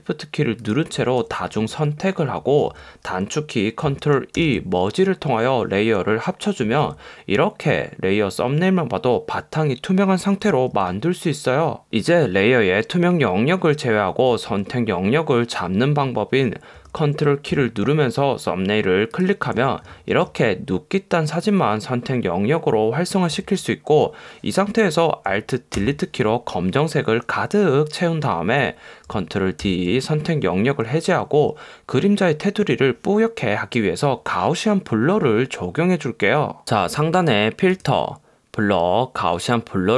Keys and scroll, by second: 25.9 alt+BackSpace, 29.7 super+d.